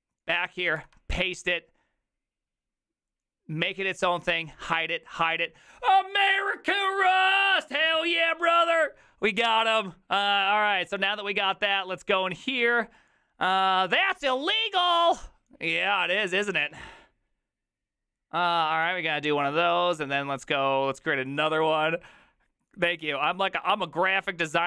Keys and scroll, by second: 0.8 ctrl+v.